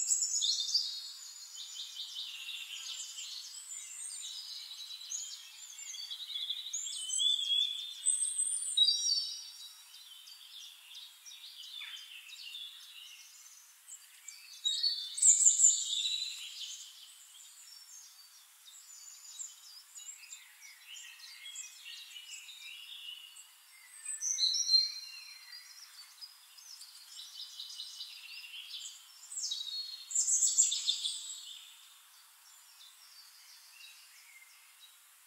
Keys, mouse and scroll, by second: 3.3 middle click, 5.9 click, 6.5 click, 8.3 click, 9.2 click, 9.9 click, 10.2 click, 10.3 click, 10.6 click, 10.7 click, 10.8 click, 11.0 click, 11.1 middle click, 11.4 click, 11.5 middle click, 12.0 click, 12.5 click, 12.8 ctrl+click, 13.3 click, 13.6 ctrl+d, 13.8 shift+click, 14.2 click, 15.1 middle click, 15.4 middle click, 15.8 click, 16.2 click, 16.7 click, 17.0 click, 17.2 click, 17.7 click, 18.2 click, 18.4 click, 18.8 click, 19.1 click, 19.5 click, 19.8 click, 20.2 ctrl+d, 20.4 ctrl+middle click, 20.4 shift+click, 20.8 click, 21.7 middle click, 22.0 click, 22.4 click, 22.6 middle click, 23.2 click, 23.6 shift+click, 24.1 click, 24.4 click, 25.4 click, 25.9 click, 27.5 shift+click, 30.1 click, 31.1 click, 34.2 click.